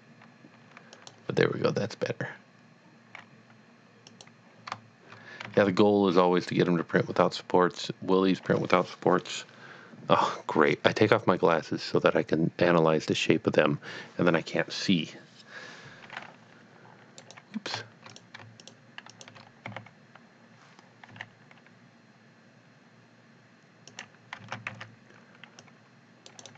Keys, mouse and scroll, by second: 0.4 z, 1.0 click, 4.1 click, 4.2 click, 6.1 g, 17.3 right click, 18.1 click, 18.6 shift+click, 19.1 double click, 19.6 d, 21.2 s, 23.9 click, 24.8 c, 25.6 click, 25.9 click, 26.2 right click.